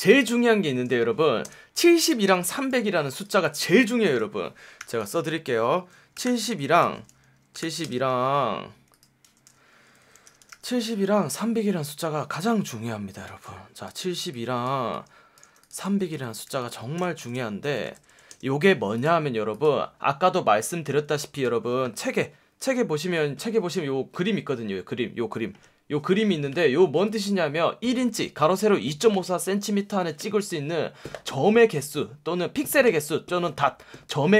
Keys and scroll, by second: 1.4 space, 2.2 Escape, 2.7 v, 4.1 BackSpace, 4.8 t, 5.8-8.1 typing, 6.7 super+a, 9.2-10.9 typing, 12.3 v, 14.0 space, 16.2 super+a, 16.4-18.4 typing, 21.0 space.